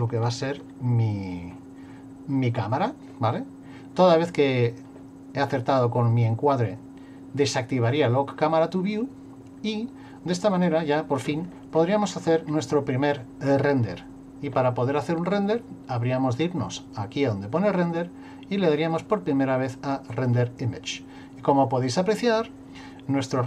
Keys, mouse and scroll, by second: 0.1 shift+middle click, 7.4 click, 11.7-14.4 scroll up 6, 16.8 click.